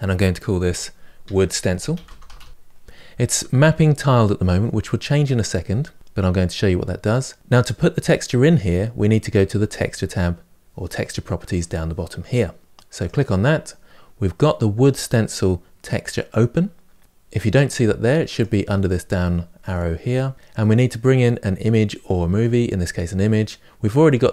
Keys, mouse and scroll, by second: 2.5 o, 18.2-24.3 drag.